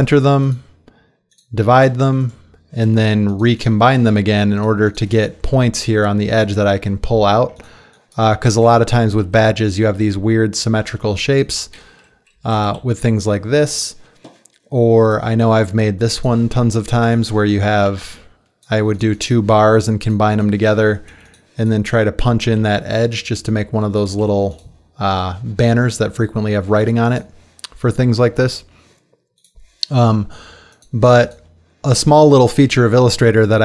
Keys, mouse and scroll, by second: 7.3 ctrl+z, 9.8 shift+Up, 12.3 shift+click, 12.5 shift+Left, 22.6 right click, 24.2 click.